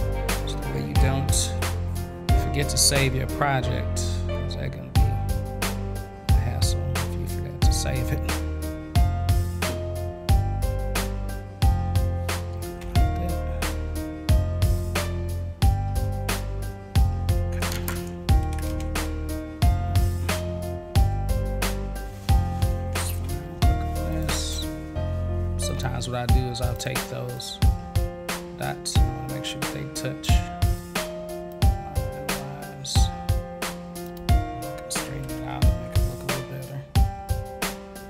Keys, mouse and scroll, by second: 5.5-7.5 drag, 9.2-10.9 drag, 12.8 ctrl+z, 14.3-15.8 drag, 20.1 middle click, 23.2 a, 24.1 click, 25.7 click, 26.6 click, 26.8 click, 27.3-30.2 drag, 31.5-34.0 drag, 34.2 click.